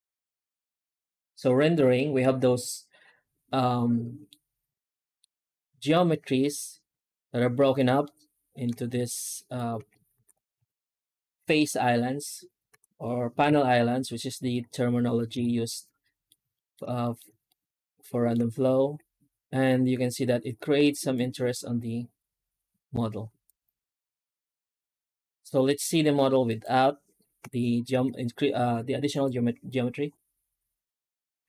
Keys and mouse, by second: 0.1 z, 1.9-4.1 middle drag, 5.1-7.6 middle drag, 7.9 shift+middle click, 9.4 right click, 9.6 Tab, 10.0 alt+shift+z, 10.4 alt+a, 11.3 l, 12.6 alt+a, 13.3 l, 14.3 Tab, 15.2 alt+a, 15.5-16.1 middle drag, 16.4 shift+middle drag, 16.9 middle click, 17.4-18.2 shift+middle drag, 18.9 z, 19.8 z, 23.3 right click, 24.3 z, 24.8 z, 26.3 right click, 27.3 h, 27.8 z, 31.3 z.